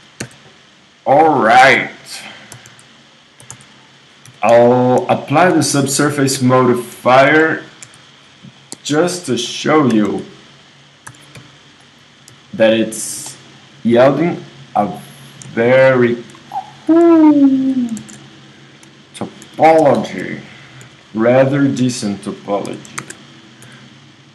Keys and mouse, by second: 0.0 e, 1.6 KP_1, 2.6 s, 3.5 s, 4.3 g, 6.3 KP_3, 7.9 ctrl+r, 10.1 s, 11.1 s, 12.3 g, 13.0 click, 13.3 middle click, 17.3 middle click, 18.1 super+z, 19.5 KP_3, 20.8 g, 22.7 z, 23.0 ctrl+Tab.